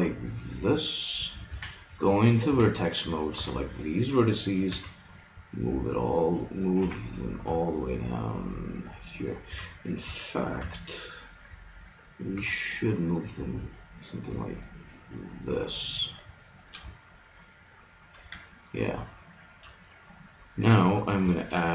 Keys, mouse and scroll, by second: 1.1 click, 1.5 ctrl+Tab, 2.5 a, 3.4 b, 4.7 g, 6.8 g, 9.5 a, 10.7 b, 12.3 g, 16.5-20.5 middle drag.